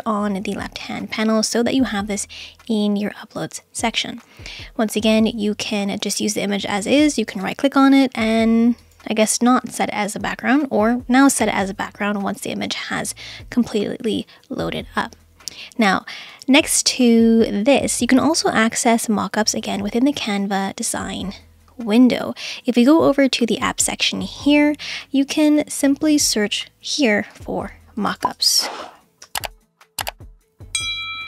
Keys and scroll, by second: 27.9-29.9 typing.